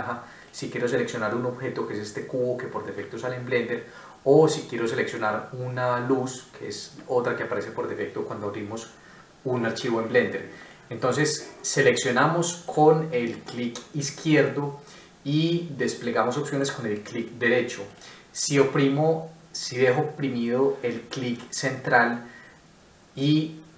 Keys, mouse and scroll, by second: 16.5 right click, 22.1 middle click.